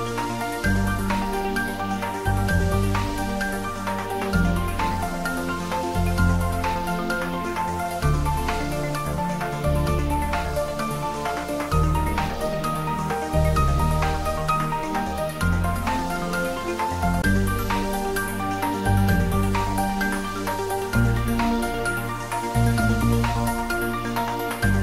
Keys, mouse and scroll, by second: 1.4-3.2 typing, 2.5 click, 4.3 click, 5.0 g, 7.1 click, 7.7 s, 8.5 click, 9.1 g, 10.1 click, 10.6-11.5 middle click, 11.8-14.1 scroll up 1, 15.7-16.6 scroll down 1, 16.6 click, 23.1-24.0 scroll up 1, 24.0 click.